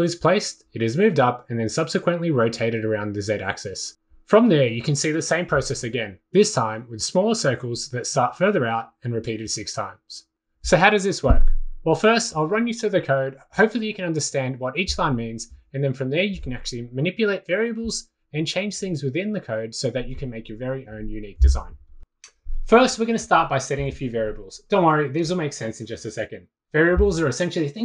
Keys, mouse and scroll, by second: 21.2-22.8 drag, 23.6-24.5 drag, 25.3 click, 26.5-27.6 typing.